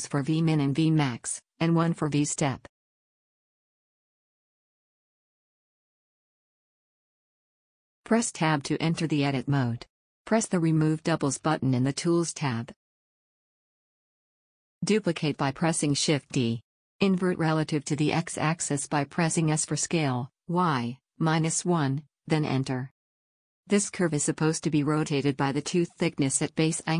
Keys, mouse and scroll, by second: 1.9-3.8 drag, 4.7-7.1 middle drag, 4.7-5.7 scroll down 1, 7.1 click, 7.3 middle click, 8.8 Tab, 10.9-14.1 drag, 15.5 shift+d.